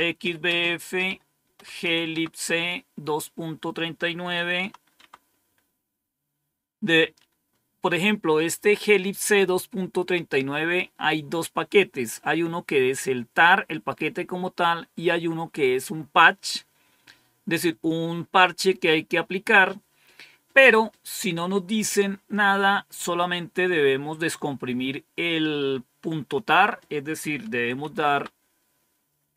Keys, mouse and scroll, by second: 0.0-2.1 typing, 4.4 Tab, 4.8 Tab, 27.4-27.7 typing, 27.9 Tab.